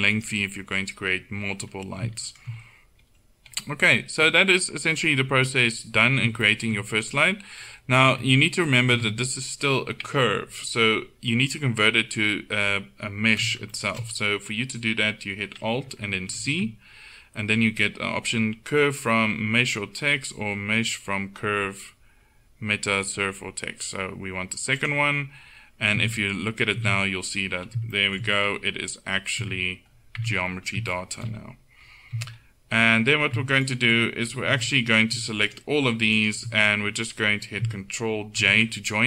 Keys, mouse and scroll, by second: 0.2-2.1 right drag, 2.4 middle click, 8.1 Tab, 9.0 Tab, 16.4 alt+c, 26.0 Tab, 26.8 a, 29.5 Tab, 30.3 Tab, 32.2 Tab, 33.7-34.7 right drag, 34.7 z, 35.7 right click, 36.9-39.0 middle drag, 38.5 ctrl+j.